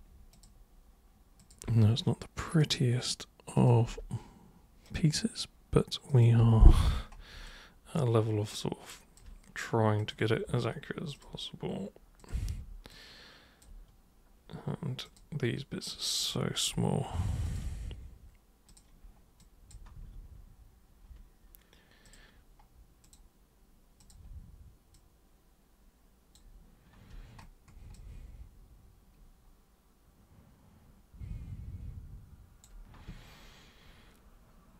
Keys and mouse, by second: 0.3 super+click, 1.4 super+click, 1.6 super+Return, 2.5 super+click, 3.5 super+click, 3.8 super+Return, 4.8 super+click, 6.1 super+click, 6.3 super+Return, 7.4-9.1 alt+super+drag, 9.9 super+click, 11.1 super+click, 12.1 super+click, 12.9 alt+super+click, 15.0 super+click, 16.2 super+click, 17.4 ctrl+super+click, 18.6 super+click, 19.3 super+click, 19.9 super+w, 22.0 super+click, 23.0 super+click, 23.9 super+click, 24.9-26.3 super+drag, 27.9-32.6 alt+super+drag.